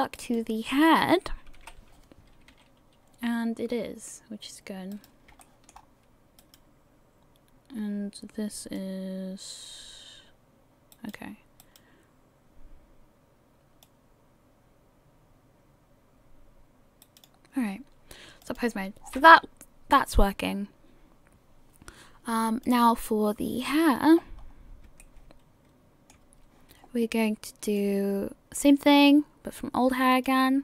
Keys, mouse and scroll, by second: 1.1 right click, 1.5 KP_1, 2.5 r, 5.4 shift+middle click, 5.8 scroll up 1, 7.2 right click, 7.2-8.5 scroll up 2, 8.8 click, 12.5 right click, 13.9 click, 18.4 click, 19.0-19.6 scroll down 5, 22.6 click, 23.9-24.9 scroll down 2, 25.0 shift+middle click, 25.0 scroll down 1, 27.7 click, 30.1 click.